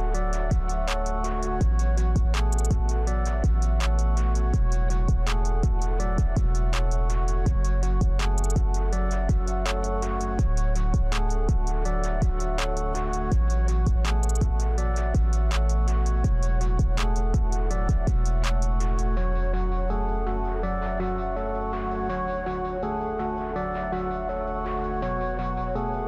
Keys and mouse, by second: 2.5 click, 3.7-5.8 middle drag, 7.0 middle click, 8.3-10.3 shift+middle drag, 11.4-12.7 shift+middle drag, 15.1 click, 16.2 alt+shift+click, 17.2 click, 18.2 alt+shift+click, 23.6 ctrl+KP_Add, 24.2 ctrl+KP_Add, 24.7 ctrl+KP_Add.